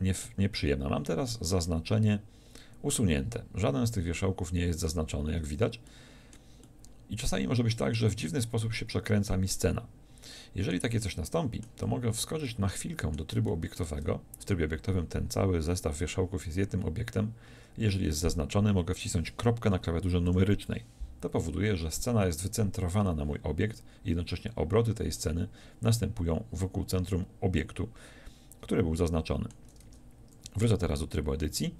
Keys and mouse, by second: 0.0 middle click, 3.8 z, 4.1 z, 10.3 middle click, 13.9 Tab, 17.1-20.4 middle drag, 20.3 KP_Decimal, 23.5-31.7 middle drag, 29.9 Tab.